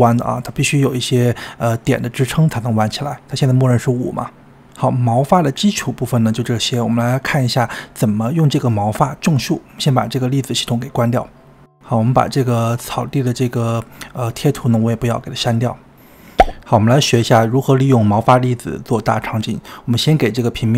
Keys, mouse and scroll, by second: 7.1-11.9 middle drag, 11.9-16.4 drag, 19.6-20.7 drag.